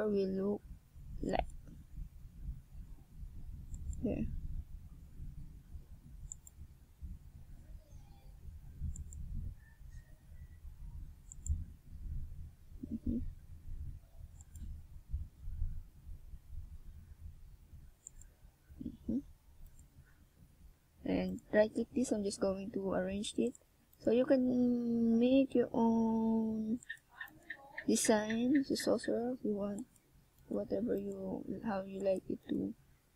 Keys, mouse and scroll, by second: 0.2 a, 2.0 a, 3.6 w, 15.4 middle click, 16.7 Tab, 16.9 middle click, 18.6 KP_1, 22.5-24.7 scroll up 2, 24.7 click, 26.7 click, 28.9 click, 32.7 middle click.